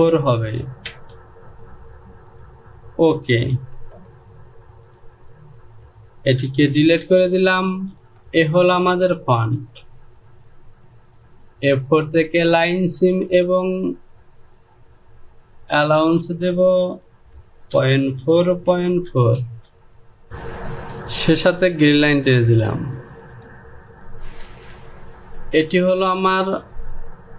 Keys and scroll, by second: 0.5 KP_4, 1.4 Return, 4.2 j, 7.7 shift+z, 10.0 Home, 18.3 KP_Decimal, 18.7 KP_4, 19.0 Down, 19.2 KP_Decimal, 19.6 KP_4, 19.9 Down, 24.1 Home, 24.9 e.